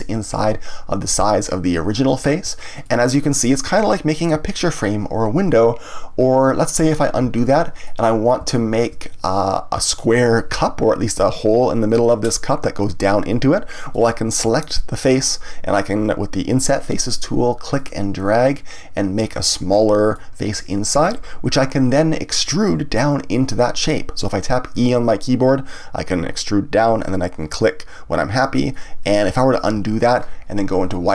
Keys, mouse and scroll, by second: 2.8-5.8 middle drag, 7.2 ctrl+z, 7.8-11.5 middle drag, 13.9 click, 17.7 click, 20.1-23.1 middle drag, 28.8 click, 29.7 ctrl+z.